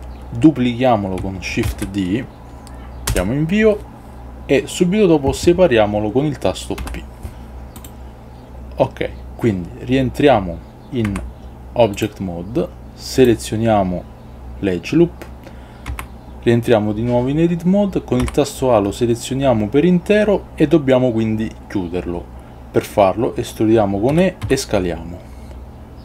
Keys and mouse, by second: 1.8 shift+d, 3.2 Return, 6.9 p, 11.2 Tab, 16.0 Tab, 18.3 a, 20.5 ctrl+z, 24.2 e.